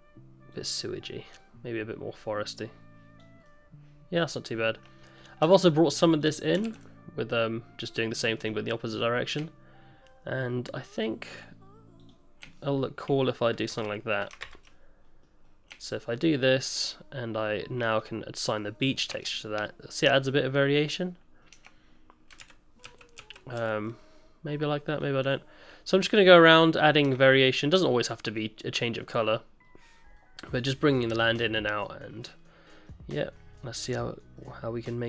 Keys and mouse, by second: 3.4 middle click, 4.8 middle click, 5.2 click, 5.4 Tab, 5.7 click, 6.7 alt+s, 8.7 click, 10.9 shift+click, 13.7 shift+KP_Add, 14.4 ctrl+KP_Add, 15.2 click, 17.9 click, 18.8 click, 19.4 Tab, 19.4 middle drag, 20.2-21.4 middle drag, 21.5 Tab, 22.4 ctrl+z, 22.8 ctrl+z, 23.6 ctrl+z, 24.9 click, 25.2 click, 26.2 click, 26.6 middle click, 27.2 Tab, 27.2 middle drag, 28.0 middle drag, 28.9 middle drag, 29.3-29.9 middle drag, 30.1-30.5 middle drag, 31.5-32.0 middle drag, 32.8 middle drag, 33.3-34.3 middle drag.